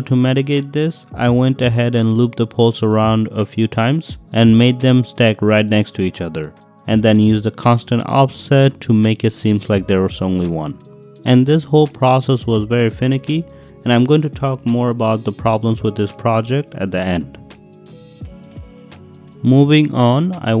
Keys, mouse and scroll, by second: 0.4 Escape, 0.7 s, 0.9 x, 3.8 click, 4.8 click, 5.8 click, 6.0 click, 6.4 click, 6.7 click, 7.9 click, 8.7 8, 9.3 click, 10.4 click, 11.7 drag, 11.8 middle click, 12.5 middle drag, 12.5 drag, 12.9 drag, 13.4 click, 14.3 click, 14.6 g, 14.7 x, 15.1 Escape, 15.3 drag, 15.9 g, 16.4 x, 17.2 middle click, 17.6 shift+middle click, 17.9 shift+middle click, 18.5 g, 18.9 g, 18.9 y, 19.0 y, 19.4 click, 20.1 click.